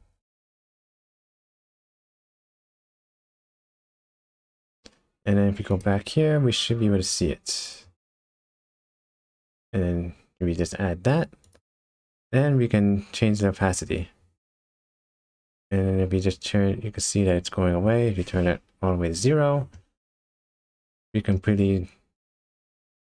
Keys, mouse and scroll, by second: 3.9-4.4 scroll down 2, 4.4-5.7 scroll up 2, 5.7 click, 6.4-7.1 scroll down 3, 7.1 click, 11.4 click, 14.0 click, 20.1-20.4 scroll down 3, 20.6 middle click, 21.4 scroll up 1.